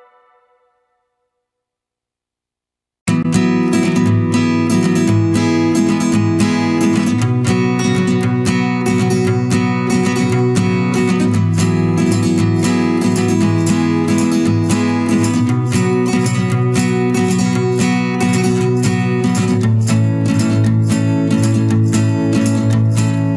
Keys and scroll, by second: 0.4 ctrl+-, 5.9 ctrl+z, 14.0 ctrl+=, 14.2 ctrl+space, 23.0 ctrl+-.